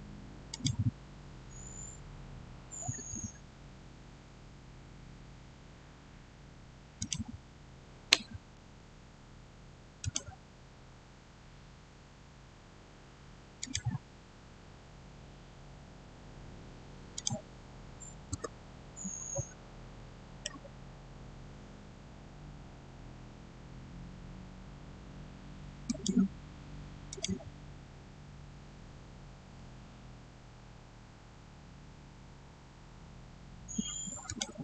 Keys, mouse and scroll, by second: 3.3 scroll up 1, 5.2 scroll up 1, 6.8 click, 8.5 Return, 9.1 scroll down 1, 9.9 click, 10.4 scroll down 1, 13.4 click, 17.0 click, 18.2 Return, 18.8-19.5 scroll down 1, 19.8-21.1 middle drag, 21.1-22.2 scroll up 1, 23.5-24.0 scroll down 1, 25.7 click, 26.2 click, 31.7 scroll up 1, 34.1 scroll up 1, 34.1 click.